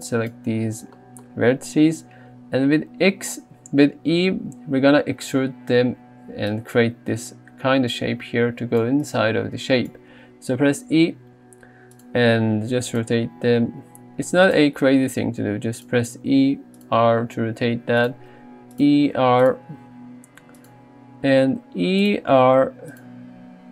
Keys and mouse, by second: 1.2 shift+middle click, 6.4-10.0 d, 9.1 right click, 10.8 e, 12.4 r, 12.9 click, 13.2 g, 15.3 e, 15.8 click, 16.3 r, 17.0 g, 18.1 click, 18.4 e, 18.8 click, 19.1 r, 19.5 click, 19.8 g, 21.5 e, 22.1 click, 22.4 r, 23.0 click.